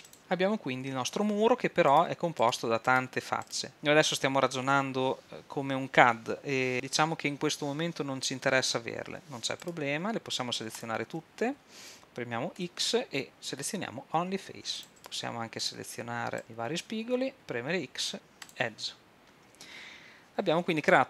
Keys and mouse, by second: 1.9-6.1 drag, 9.7-11.5 drag, 12.6 x, 17.3 x.